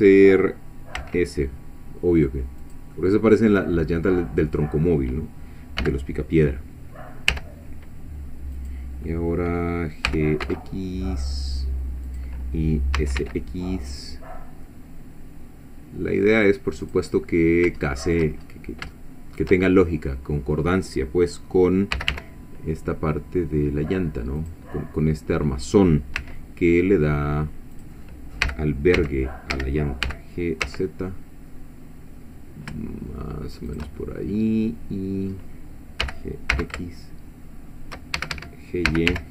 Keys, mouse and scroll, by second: 1.0 s, 2.6 click, 3.0-5.1 middle drag, 5.8 g, 7.3 y, 8.6 click, 10.1 g, 10.5 x, 12.1 click, 13.0 s, 13.2 x, 16.9 click, 17.1-18.3 middle drag, 18.4-18.8 shift+scroll up 3, 18.9 shift+middle click, 19.7 shift+scroll up 2, 21.9 g, 22.1 y, 24.4 click, 26.2 s, 27.8 click, 28.4 g, 29.0 x, 29.5 Escape, 30.1 g, 30.6 z, 33.7 shift+click, 34.0-35.5 shift+middle drag, 36.0 g, 36.5 x, 38.2 shift+Escape, 38.9 shift+g, 39.1 y.